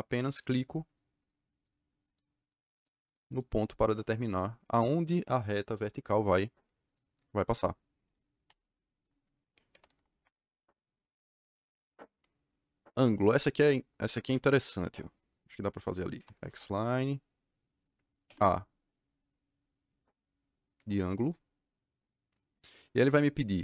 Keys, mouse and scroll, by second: 0.1 click, 0.4 click, 0.8 click, 1.1 click, 1.5 click, 2.0 click, 2.4 click, 2.7 click, 3.2 click, 3.7 click, 5.6 KP_Enter, 6.8 click, 7.4 click, 9.4-10.3 typing, 14.0 Escape, 14.1 Escape, 14.3 Escape, 15.8-16.7 typing, 18.2 a, 21.1 KP_Enter.